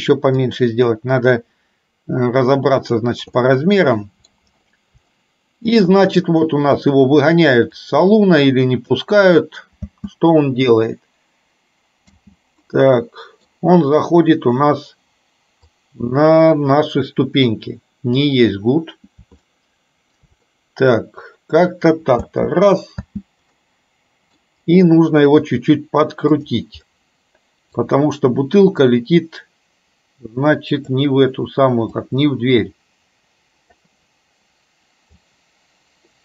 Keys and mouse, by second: 0.5-3.2 drag, 3.5 middle click, 5.2 shift+middle click, 8.1-9.1 drag, 9.8 space, 12.2 space, 12.7 middle click, 15.8-18.2 drag, 19.6 shift+middle click, 20.6-21.7 middle drag, 23.1 space, 23.7 middle click, 26.5 click, 27.0 middle click, 28.8-31.0 drag, 32.1-33.8 drag, 35.3-36.2 drag.